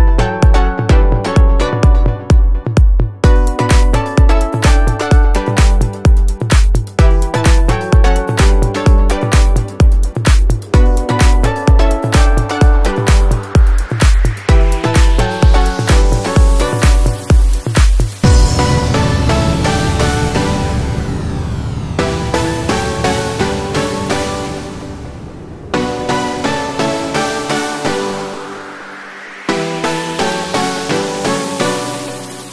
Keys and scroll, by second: 0.5 ctrl+t, 6.2 ctrl+a, 9.2 ctrl+a, 18.2 ctrl+t, 23.8 ctrl+t, 26.6 ctrl+0.